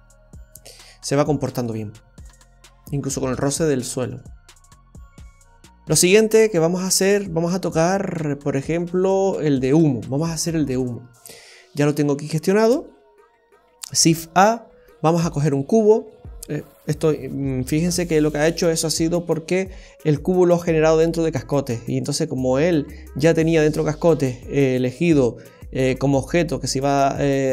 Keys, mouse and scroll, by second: 1.2 middle click, 1.8-2.4 scroll down 2, 4.4 middle click, 5.6-6.4 scroll up 4, 6.4 middle click, 10.8-11.8 scroll down 6, 12.6 space, 14.1 shift+a.